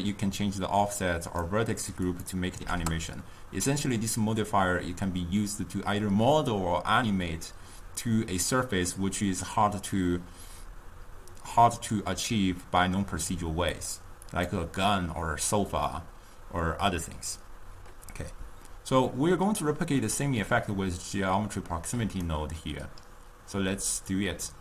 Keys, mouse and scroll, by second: 0.2-5.4 drag, 13.8 click, 14.5 click, 22.4-24.6 right drag.